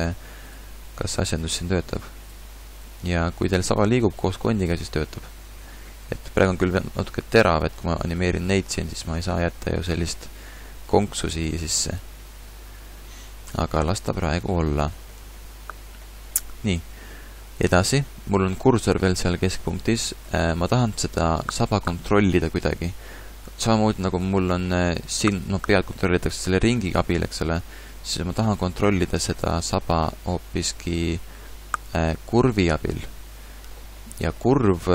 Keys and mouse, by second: 0.9 r, 3.0 r, 4.9 r, 8.1 r, 10.2 click, 13.6 ctrl+z, 13.8 ctrl+z, 14.2 ctrl+z, 32.7 n.